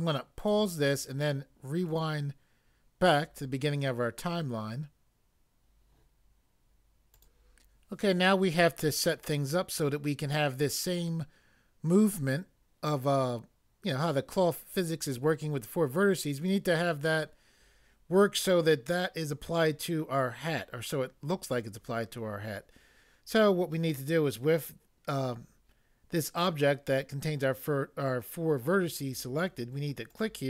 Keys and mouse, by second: 0.4 click, 1.9 click, 7.1 click, 7.2 click, 30.1 click.